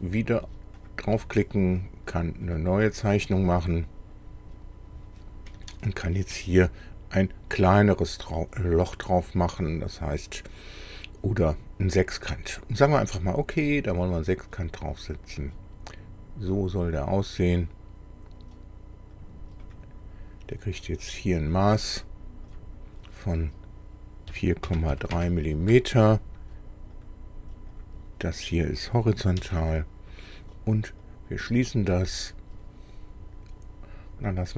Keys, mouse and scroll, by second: 0.9 click, 2.5 click, 5.3 scroll down 2, 5.7 shift+middle click, 6.6-7.2 shift+scroll up 3, 13.5 click, 15.3 click, 19.2 click, 19.7 right click, 21.1 click, 22.6 click, 24.3 KP_4, 24.7 KP_Decimal, 25.0 KP_3, 25.2 KP_Enter, 27.0 click, 27.8 click, 29.4 h, 31.1 click.